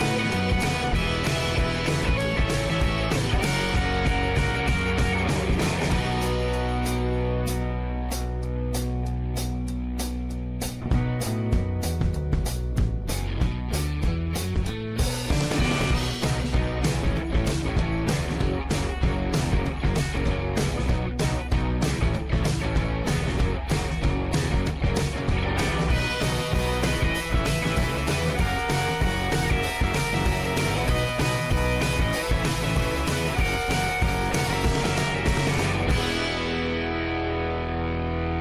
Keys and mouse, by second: 0.7 k, 4.0 shift+middle click, 6.6 shift+middle click, 7.5 2, 8.1 click, 9.0 middle click, 9.5 shift+click, 10.4 ctrl+z, 12.6 shift+middle click, 13.7 shift+middle click, 14.3 middle click, 15.3 2, 15.6 click, 16.4 x, 17.4 shift+middle click, 17.9 1, 18.5 shift+middle click, 20.8 m, 21.9 click, 22.5 shift+middle click, 24.6 shift+middle click, 25.6 shift+middle click, 27.3 g, 28.5 click, 28.8 g, 30.7 middle click, 31.3-34.9 drag, 35.8 shift+middle click, 36.4 shift+middle click, 37.5 ctrl+s.